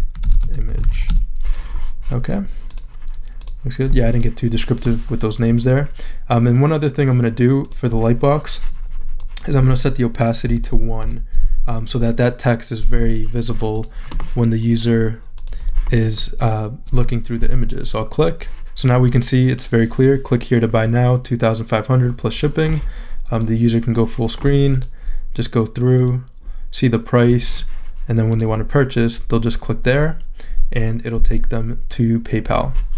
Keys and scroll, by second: 0.0-1.5 typing, 10.5 shift+\, 11.0 Return.